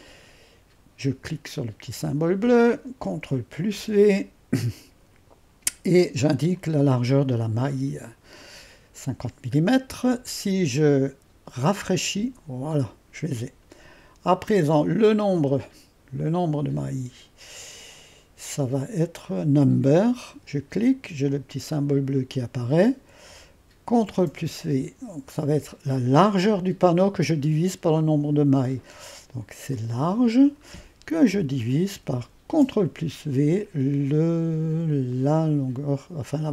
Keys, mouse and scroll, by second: 0.0-3.0 drag, 3.6 ctrl+v, 6.5-10.9 drag, 11.7-14.8 drag, 15.3-17.1 drag, 20.3-23.3 drag, 24.0 ctrl+v, 29.7-30.7 drag, 31.3 /, 32.5 ctrl+v, 35.1-36.5 drag.